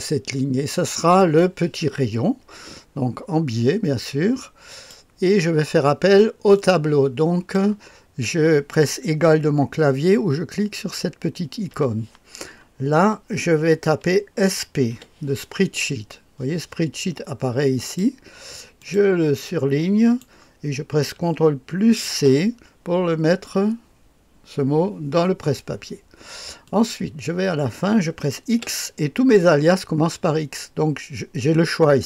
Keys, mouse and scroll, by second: 4.6 click, 6.5-7.5 drag, 11.9 =, 14.5-15.4 typing, 17.8 click, 18.7 click, 19.4-20.2 drag, 22.0 ctrl+c, 26.6 click, 28.5 x.